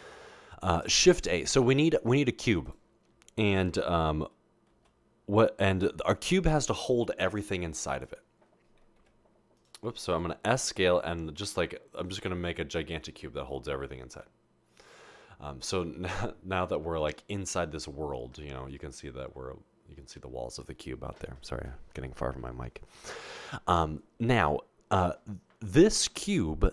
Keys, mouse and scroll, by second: 1.0 a, 7.5 s, 9.2 typing, 10.2 typing.